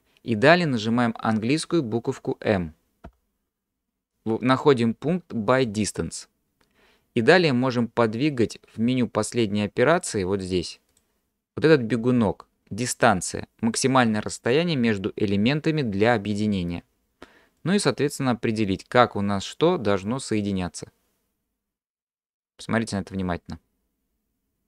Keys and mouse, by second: 3.1 m, 10.0 click, 10.9 drag, 17.6-24.6 drag.